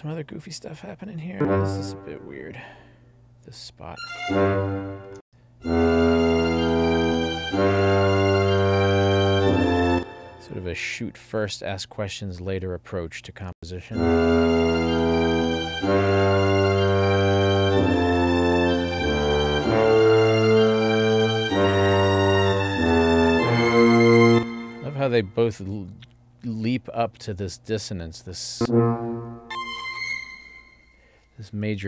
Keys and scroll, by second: 5.3 space, 9.9 space, 13.6 space, 24.3 space.